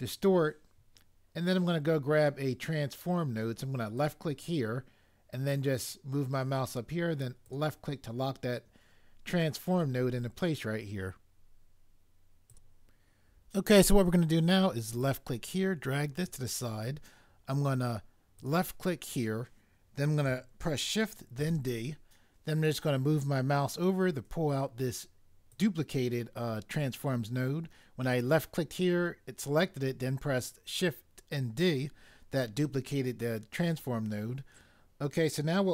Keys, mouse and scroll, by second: 3.9 click, 7.5 click, 12.4 click, 12.5 click, 15.0 click, 18.4 click, 21.4 d, 25.5 click.